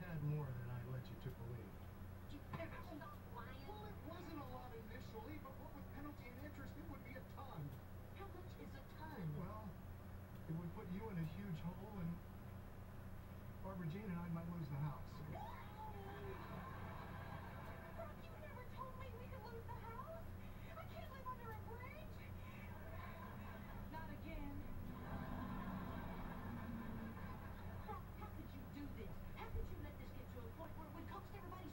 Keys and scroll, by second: 3.3 [, 4.8 [.